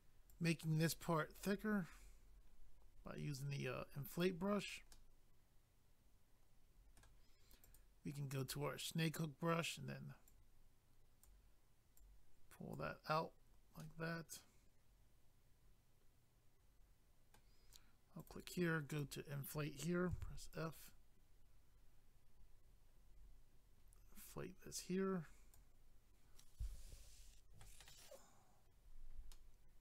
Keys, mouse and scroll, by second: 0.3 click, 4.6 scroll down 1, 4.9 middle click, 7.6 click, 7.7 click, 8.4 click, 8.5 click, 10.3 click, 12.0 click, 13.8 middle click, 18.2 click, 18.3 click, 18.9 click, 19.0 click, 20.1 f, 20.5 click, 20.6 click, 20.8 click, 29.3 middle click.